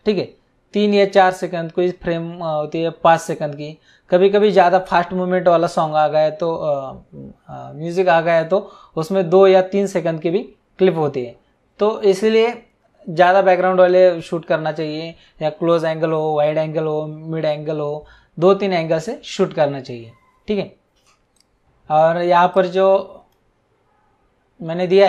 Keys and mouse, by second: 21.4 click, 22.5 click.